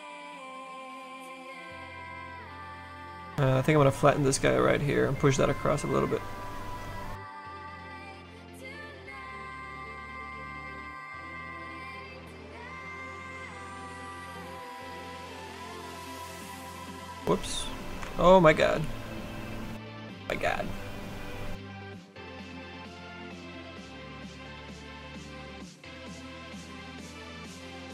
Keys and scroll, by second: 18.2 ctrl+z, 18.6 s, 26.7 s.